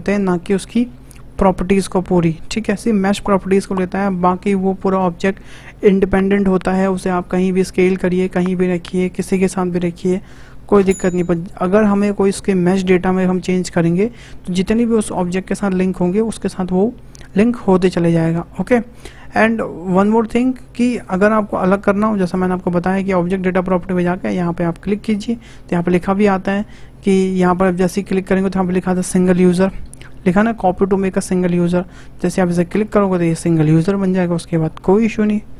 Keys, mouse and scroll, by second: 21.6 click, 32.7-35.5 drag.